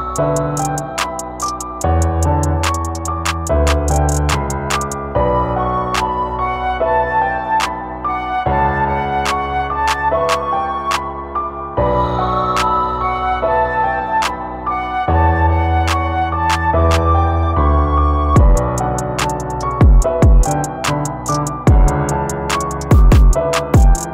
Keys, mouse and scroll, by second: 1.0 ctrl+middle click, 1.4 s, 5.4-7.8 drag, 9.1 click, 11.2-12.4 drag, 13.5-15.2 drag, 18.3-20.0 drag, 20.0-21.7 middle drag.